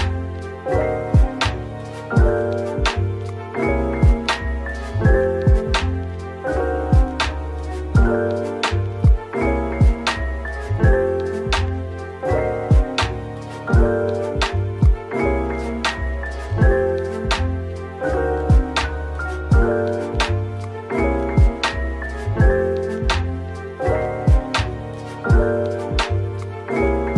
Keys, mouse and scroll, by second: 0.7-1.0 scroll down 1, 1.6 Tab, 2.0-4.2 typing, 8.7 typing, 9.4 alt+click, 10.3 ctrl+b, 11.2-11.7 scroll up 1, 12.4 Tab, 12.9 Tab, 13.7-14.7 typing, 15.7 typing, 19.5-20.5 typing, 22.0 typing, 22.7 right click, 23.6 typing, 25.5 typing, 26.6 typing.